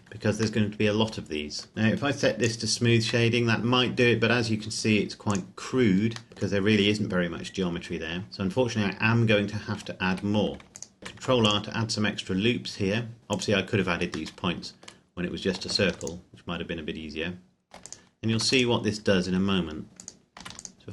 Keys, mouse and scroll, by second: 0.6 middle click, 2.5 click, 3.5 middle click, 5.5 click, 6.3 middle click, 6.8-7.9 scroll down 1, 7.9-8.3 scroll up 1, 8.4-9.0 scroll up 1, 9.0 Tab, 10.4 a, 10.7 ctrl+r, 10.7 click, 11.3 ctrl+r, 11.4 click, 13.4 click, 14.4 middle click, 15.1-15.6 scroll up 1, 15.8 ctrl+r, 16.1 click, 18.4 ctrl+r, 18.5 click, 20.5 ctrl+r, 20.6 click.